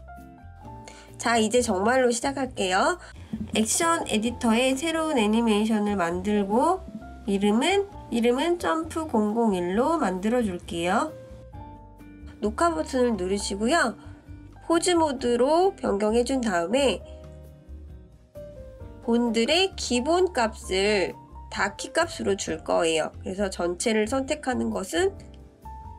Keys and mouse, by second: 3.3-8.5 drag, 9.9-12.2 drag, 12.4 click, 15.0 click, 16.3 a.